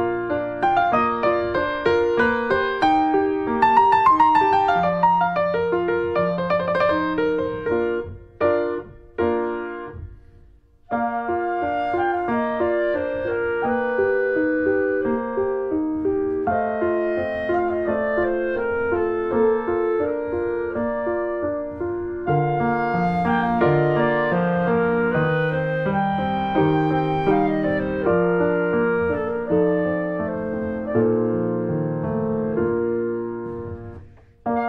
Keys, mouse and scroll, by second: 0.7-1.9 drag, 1.9 shift+middle click, 2.2-3.2 drag, 3.2 shift+middle click, 3.7 click, 4.1-4.5 scroll up 3, 4.2 shift+middle click, 4.5-5.7 drag, 5.7 shift+middle click, 6.0-7.1 drag, 7.1 scroll up 1, 7.4-8.5 drag, 8.5 scroll down 2, 8.7 shift+middle click, 9.3-10.8 drag, 10.8 shift+middle click, 11.3-14.2 drag, 14.2 scroll down 1, 14.4 middle click, 14.5 click, 14.8 shift+middle click, 14.9 click, 15.1 scroll down 2, 15.2 shift+middle click, 15.6 click, 16.1-16.9 scroll up 3, 16.2 shift+middle click, 16.6 middle click, 16.9 shift+middle click, 17.3 click, 18.1 scroll down 2, 18.2 shift+middle click, 18.7 click, 19.3 ctrl+z, 19.5 click, 20.2 scroll down 1, 20.4 shift+middle click, 20.8 click, 21.3 ctrl+z, 21.6 click, 22.2 shift+middle click, 22.6 click, 22.6 scroll up 1, 22.8 shift+middle click, 23.1 click, 24.1 shift+middle click, 24.3-26.5 drag, 26.5 scroll down 1, 26.7 scroll up 1, 26.8 shift+middle click, 27.1 ctrl+click, 27.8 ctrl+z, 28.0 click, 28.5 ctrl+z, 28.9 shift+click, 29.8 middle click, 29.9 scroll up 1, 30.0 ctrl+z, 30.4 click, 31.0 ctrl+z, 31.1-32.5 ctrl+drag, 32.5-33.1 scroll down 2, 32.6 shift+middle click, 33.1 shift+middle click, 33.4 shift+click, 33.8 shift+middle click, 34.0 click, 34.1 middle click, 34.2 scroll up 1, 34.3 shift+middle click.